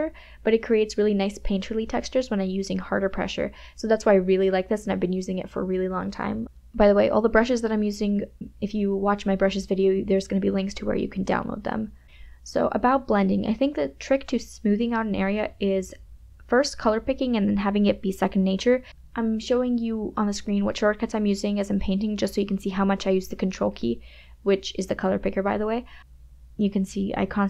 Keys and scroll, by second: 10.3 KP_Subtract.